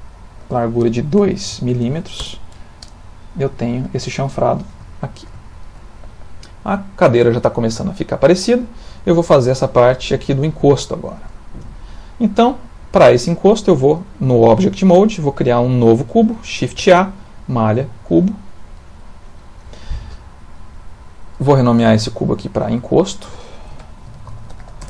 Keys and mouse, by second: 1.5 m, 3.6 middle click, 4.9 ctrl+middle click, 5.5 shift+middle click, 6.3 middle click, 10.7 shift+middle click, 11.4 middle click, 16.8 shift+a, 20.1 middle click, 22.0 click, 22.2 click, 22.7 click, 22.8 click.